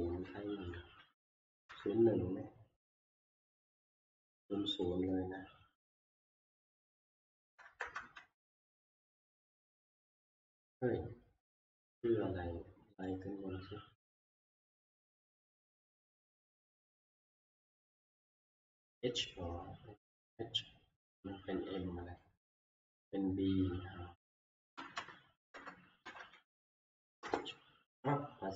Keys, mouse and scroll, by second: 0.1 Right, 1.3 1, 1.7 Return, 4.9 click, 6.9 click, 7.8 typing, 8.1 Return, 9.9 0, 11.3-11.9 scroll, 13.3 click, 15.4 click, 16.3 click, 22.1 click, 23.0 click, 25.0 Up, 25.8 shift+Up, 26.0 Right, 26.9 h, 27.2 Return.